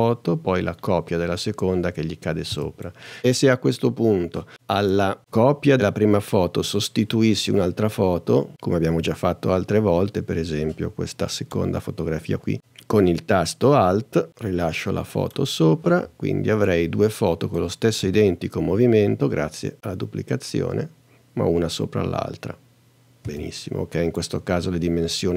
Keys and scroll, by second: 2.5 space, 18.0 space, 23.3 space.